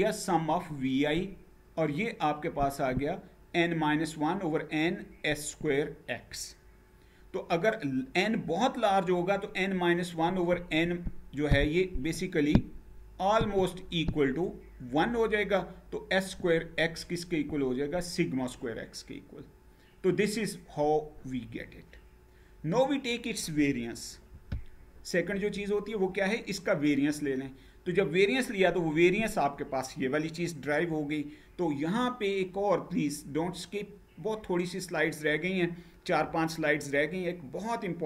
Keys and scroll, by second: 23.8 Down.